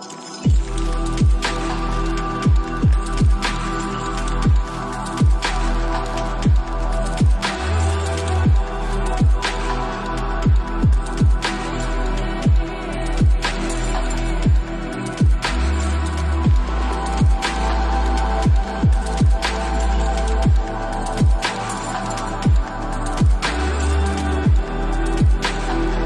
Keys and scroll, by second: 0.5 t, 1.0 Tab, 1.3 ., 3.0-3.9 typing, 4.8 Tab, 5.5-6.8 typing, 22.8 2, 23.3 Return.